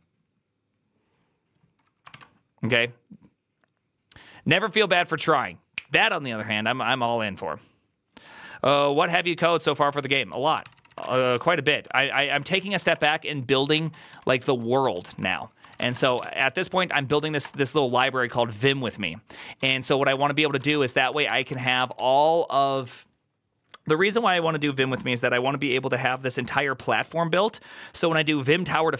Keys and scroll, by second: 2.0 ctrl+w, 10.5 alt+{, 10.5 ctrl+c, 10.6-13.2 typing, 11.9 ctrl+a, 12.3 ctrl+c, 12.4 ctrl+c, 13.8 ctrl+u, 13.9 ctrl+u, 14.4 ctrl+u, 14.7 ctrl+u, 15.4-17.8 typing, 19.5-22.1 typing.